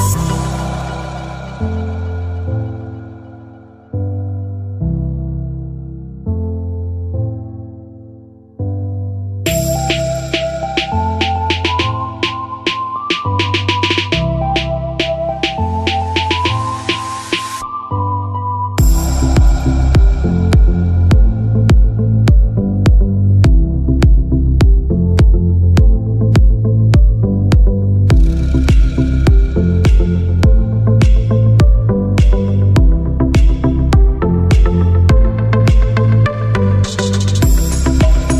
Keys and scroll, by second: 1.3 typing, 3.6 typing, 30.6 ctrl+[, 31.8 ctrl+], 37.4 ctrl+z.